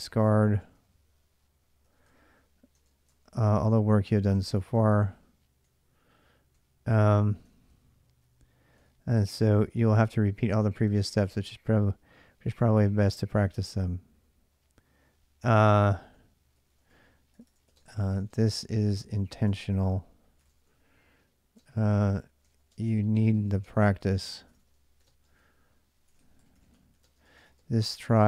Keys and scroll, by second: 0.0-6.4 typing, 1.9 Return, 7.3 ctrl+[, 7.4 ctrl+j, 9.2 j, 10.5 k, 10.7 k, 10.8 k, 11.0 k, 12.1-13.8 typing, 14.8-28.2 typing.